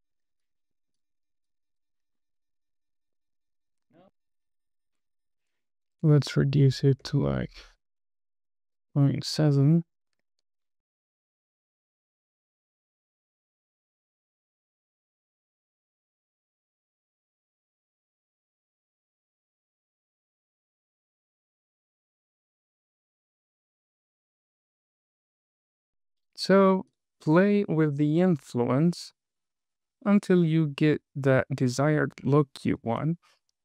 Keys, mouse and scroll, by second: 0.2 super+v, 0.4 click, 0.6 super+v, 0.8 shift+middle click, 1.3 super+v, 1.4 click, 1.6 super+v, 2.0 super+v, 2.2 click, 2.3 super+v, 2.7 super+v, 2.9 click, 3.0 super+v, 3.2 shift+middle click, 3.7 super+v, 3.8 scroll down 1, 3.8 shift+middle click, 4.0 space, 4.8 space, 5.5-8.6 drag, 10.7 super+c, 10.9 click, 11.1 super+v, 11.5 super+v, 11.7 click, 11.9 super+v, 12.1 click, 12.3 super+v, 12.5 click, 12.7 super+v, 12.9 click, 13.1 super+v, 13.4 super+v, 13.6 click, 13.8 super+v, 14.0 click, 14.2 super+v, 14.4 click, 14.6 super+v, 14.9 super+v, 15.1 click, 15.3 super+v, 15.6 super+v, 15.9 click, 16.0 space, 18.2 space, 18.4 click, 19.0 click, 19.6 super+c, 19.7 click, 19.9 super+v, 20.3 super+v, 20.5 click, 20.7 super+v, 21.0 super+v, 21.2 click, 21.4 super+v, 21.7 super+v, 21.9 click, 22.1 super+v, 22.2 click, 22.4 super+v, 22.8 super+v, 23.0 click, 23.1 super+v, 23.4 click, 23.6 super+v, 23.8 click, 24.0 super+v, 24.2 click, 24.7 click, 24.8 space, 26.2 space, 27.2 click, 27.7 space, 32.5 space, 33.0 click.